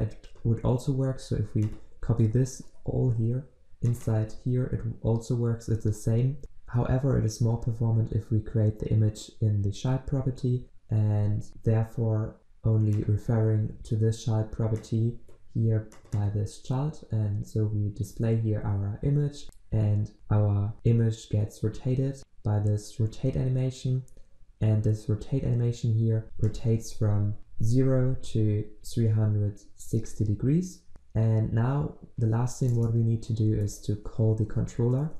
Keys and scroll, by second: 2.1 ctrl+w, 3.0 ctrl+c, 4.2 ctrl+v.